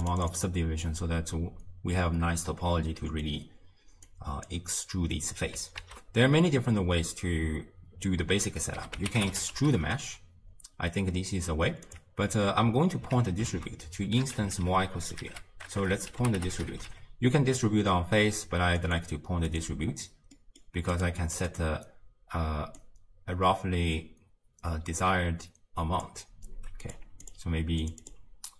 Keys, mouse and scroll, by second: 0.9-4.1 middle drag, 4.1-9.9 drag, 13.0 x, 21.5 click, 23.0-25.9 drag, 27.3 drag, 28.0-28.5 drag.